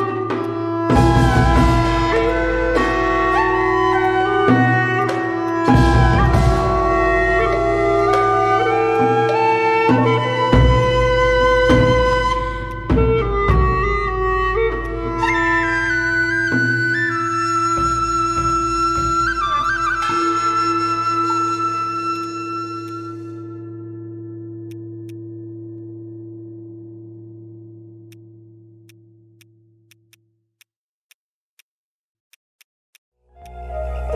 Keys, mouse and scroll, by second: 6.0 scroll up 1, 8.6 scroll down 1, 8.9 alt+click, 10.8 alt+right click, 13.2 alt+middle click, 13.5 alt+click, 17.4-17.8 scroll up 1, 19.1 alt+click, 19.6 right click, 20.2 scroll down 1, 20.4 scroll up 1, 20.7 alt+middle click, 21.5 double click, 22.1 shift+click, 22.9 alt+click, 25.1 alt+click, 30.1 right click.